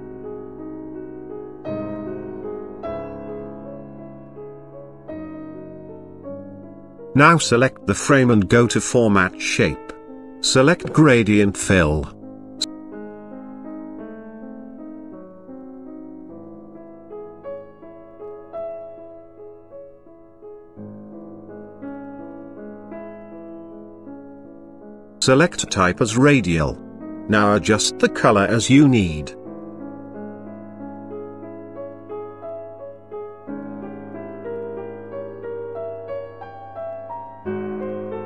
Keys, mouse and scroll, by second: 0.7 click, 3.8 click, 4.9 click, 6.3 click, 7.0 right click, 8.6 click, 9.8 click, 12.2 click, 16.5 click, 17.3 click, 19.5 click, 21.8 click, 23.3 click, 23.8 click, 25.4 click, 26.4 click, 27.0 click, 28.8 click, 30.6 click, 34.2 click, 35.3 click, 36.1 click, 38.0 click.